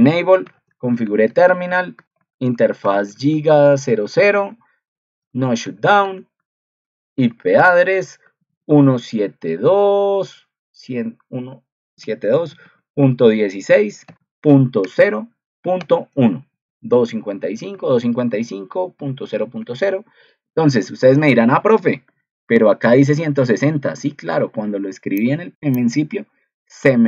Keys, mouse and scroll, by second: 22.0 ctrl+2.